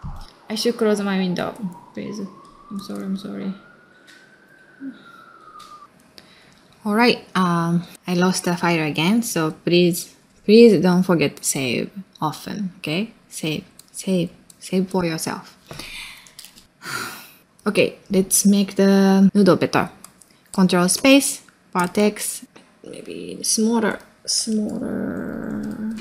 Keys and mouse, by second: 0.3 click, 0.5 middle click, 0.6 space, 0.9 middle click, 1.2 click, 1.4 space, 1.6 middle click, 1.9 middle click, 2.5 middle click, 2.9 click, 3.1 middle click, 3.2 space, 3.4 middle click, 3.9 click, 4.0 space.